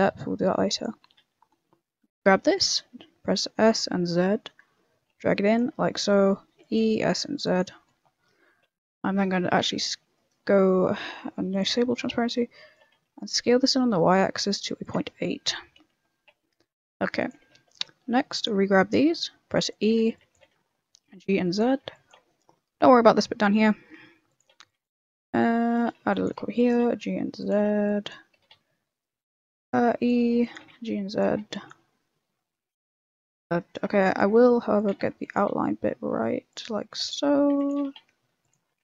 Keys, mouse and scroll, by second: 1.1 e, 2.9 s, 6.2 e, 6.8 s, 8.7 KP_3, 9.6 s, 10.3 middle click, 11.5 click, 11.7 middle click, 12.0 s, 15.0 middle click, 15.7 KP_1, 17.1 click, 17.4 a, 17.7 b, 18.6 shift+middle click, 19.0 e, 19.9 a, 20.1 b, 20.3 g, 21.8 b, 22.2 shift+middle click, 23.8 e, 24.4 a, 24.6 b, 24.8 g, 25.8-28.3 typing, 26.0 ctrl+r, 29.4-31.7 typing, 32.7 g, 33.7-35.3 typing, 36.8-38.8 typing.